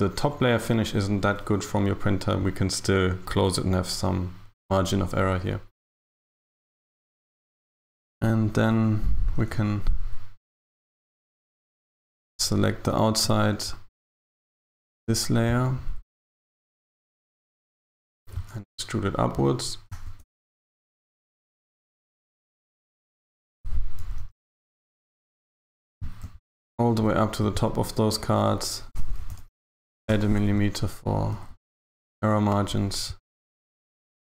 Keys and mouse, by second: 7.2 Tab, 8.0 a, 8.1 a, 8.9 alt+shift+right click, 9.7 alt+shift+right click, 10.7 a, 10.8 a, 11.3 alt+shift+right click, 12.0 alt+shift+right click, 13.8 alt+shift+right click, 17.0 alt+shift+right click, 18.3 KP_1, 20.0 e, 20.3 g, 24.0 g, 29.3 g, 31.4 a, 31.6 a, 34.2 z.